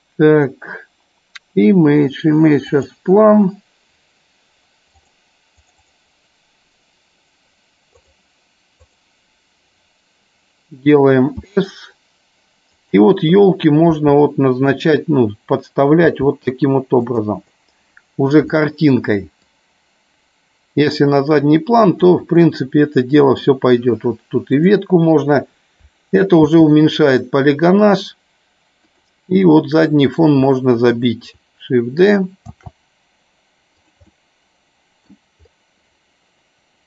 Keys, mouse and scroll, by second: 12.8 click, 14.8 click, 16.2 g, 17.2 click, 17.5 middle click, 19.4-22.0 drag, 22.4-23.5 middle drag, 26.5 shift+d, 29.8 middle click, 32.5 shift+d, 33.8 click, 34.0-35.3 middle drag.